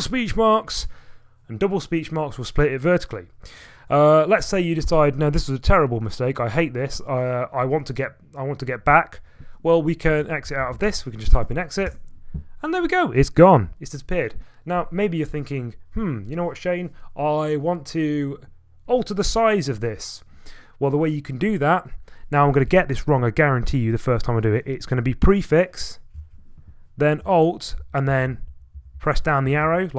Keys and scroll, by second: 1.8 typing, 10.2-11.4 typing, 11.9 Return, 26.2 ctrl+a, 27.8 alt+Left, 28.1 alt+Left, 28.5 alt+Left.